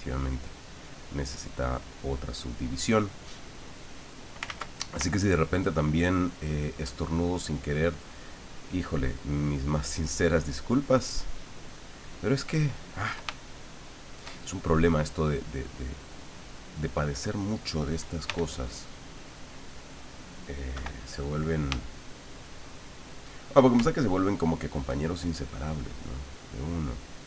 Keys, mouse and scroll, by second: 3.4-4.4 drag, 4.5 ctrl+z, 5.0-8.8 ctrl+drag, 9.0-13.1 ctrl+drag, 13.4 ctrl+shift+middle click, 16.0 click, 16.9 click, 18.3 f, 19.6 click, 20.7 KP_1, 21.8-23.6 shift+drag, 25.3-27.2 ctrl+drag.